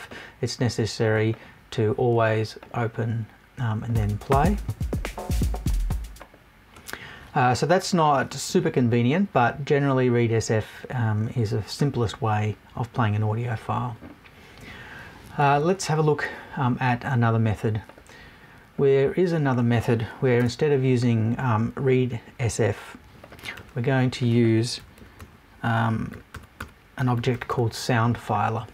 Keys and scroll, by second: 20.3 BackSpace.